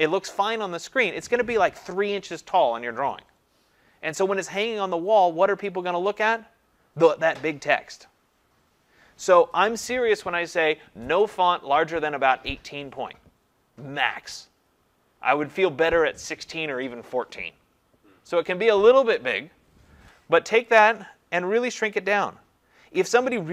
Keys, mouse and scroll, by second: 20.6 click, 20.8 click, 22.8 ctrl+a.